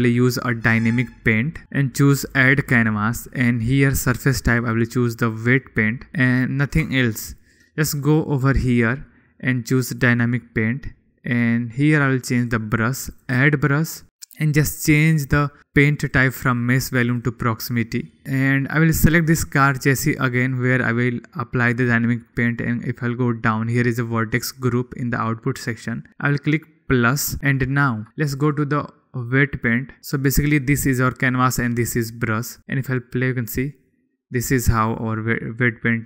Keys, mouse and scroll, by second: 2.9-3.2 drag, 4.8-6.1 drag, 7.4-8.3 shift+middle drag, 8.7 middle click, 12.5-13.1 drag, 13.7 click, 16.7-17.9 drag, 27.8 shift+middle drag, 33.4 middle click.